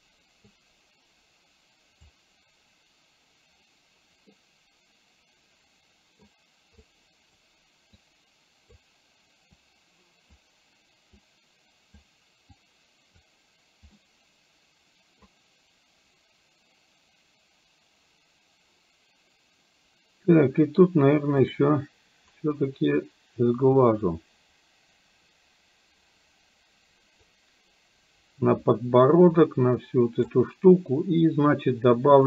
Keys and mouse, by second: 0.6-2.1 drag, 4.4-6.4 middle drag, 6.9 click, 8.0 click, 9.7 click, 11.2 click, 12.6 click, 14.0-15.2 middle drag, 21.5 click, 23.0-30.4 drag.